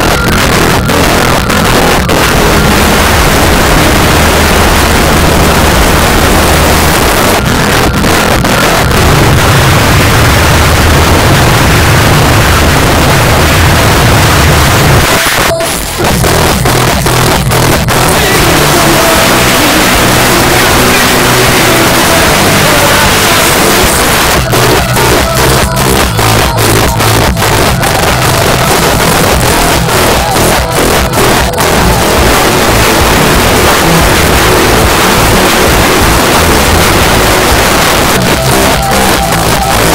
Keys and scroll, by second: 15.0 Page_Down, 23.9 Page_Down, 37.6 Page_Down.